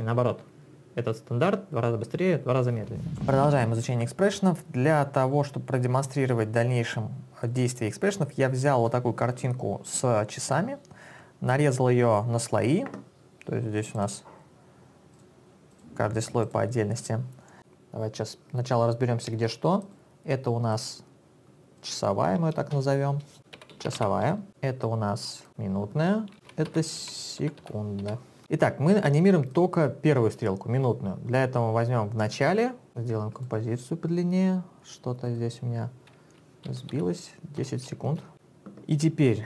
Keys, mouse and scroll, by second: 15.5 click, 19.9 click, 20.8 click, 21.8 click, 21.9 click, 22.8 Return, 23.5-24.9 typing, 24.6 click, 25.5 double click, 26.2-29.3 typing, 27.2 click, 29.5 click, 32.9 click, 33.4 click, 35.3 click, 36.7 Left, 36.9 Delete, 37.6 1, 38.3 click.